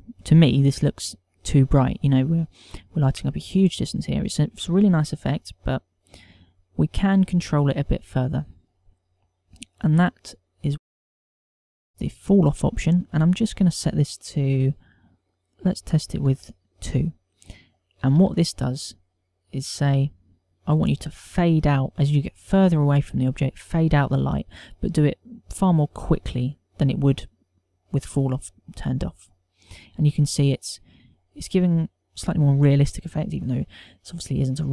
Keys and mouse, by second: 9.4 click, 11.3 click, 14.1 click, 19.8 F12.